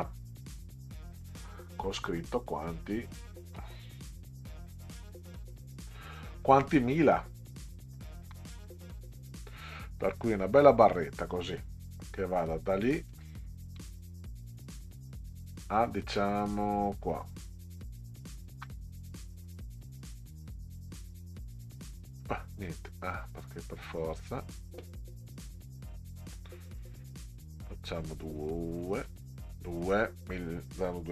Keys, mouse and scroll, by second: 0.0-1.0 drag, 2.2 Right, 2.9 Right, 3.5 Right, 4.1 Right, 5.0 Right, 6.7 click, 7.9-8.3 ctrl+scroll up 2, 10.8 click, 13.1 click, 17.9 ctrl+click, 19.3 right click, 23.3 click, 24.1 click, 25.6 click, 28.1 click, 29.7 click.